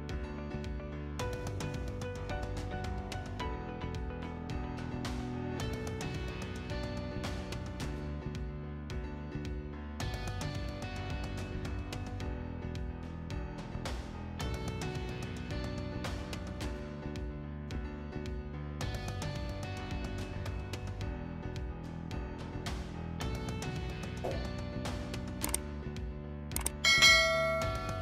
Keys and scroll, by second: 0.8 8, 1.0 Return, 3.6 6, 4.2 Return, 6.9 Return, 15.6 Escape, 17.6 Delete.